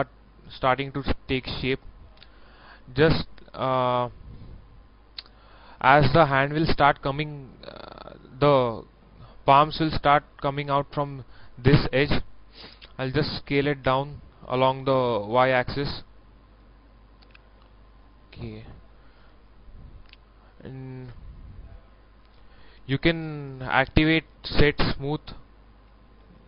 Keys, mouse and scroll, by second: 1.0 shift+middle click, 1.7-2.0 scroll up 1, 2.7-4.0 middle drag, 4.6 scroll down 1, 4.9 middle click, 13.4 s, 14.7 y, 18.0 click, 19.9 shift+middle click, 22.6 shift+middle click, 24.0-24.7 scroll up 1, 24.7 click, 26.1 a.